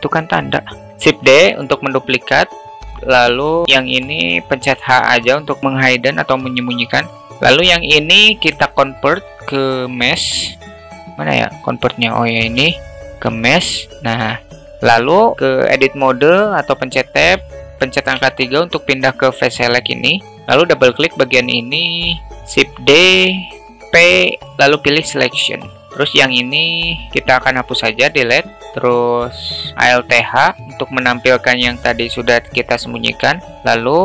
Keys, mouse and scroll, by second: 0.9 shift+d, 2.7-3.6 alt+middle drag, 4.3 h, 6.9 middle click, 14.6 Tab, 17.7 3, 20.4 click, 22.4 shift+d, 23.8 p, 25.8 Tab, 26.6 click, 27.2 Delete, 29.7 alt+h, 33.7-34.0 alt+middle drag.